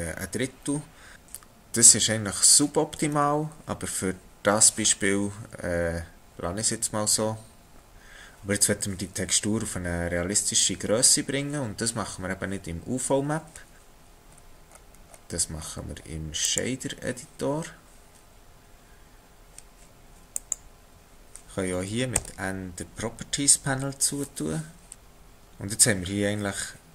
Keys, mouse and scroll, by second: 7.9-8.5 scroll up 2, 13.8 click, 14.3-16.5 scroll up 14, 16.5 click, 22.2 n.